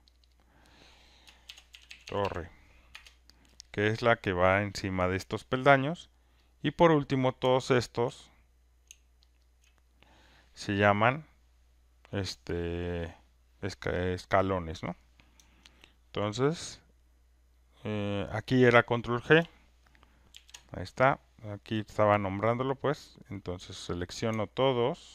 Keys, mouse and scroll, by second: 0.3 click, 0.5 click, 1.2-2.7 typing, 2.9 Return, 6.5 click, 9.3 shift+click, 9.5 shift+click, 20.3 ctrl+g, 21.8 click, 24.0 click.